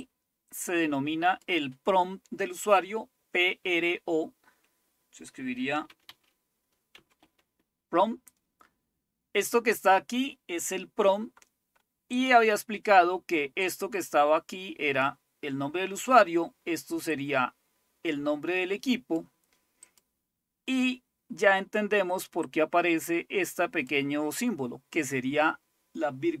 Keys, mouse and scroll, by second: 1.5-4.0 drag, 5.3-7.2 typing, 12.1 click, 13.6-15.8 drag, 17.1-26.4 drag.